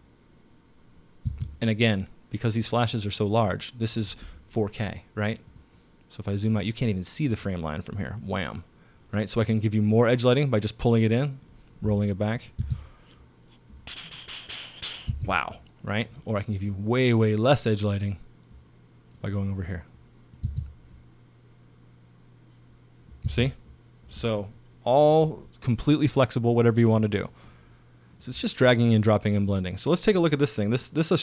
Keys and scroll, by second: 1.3 space, 12.6 space, 15.1 space, 20.4 space, 23.3 space.